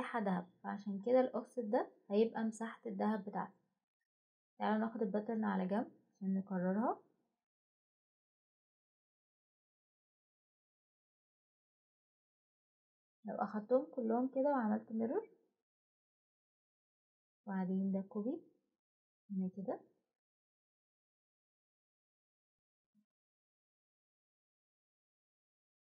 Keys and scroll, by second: 24.4 Escape.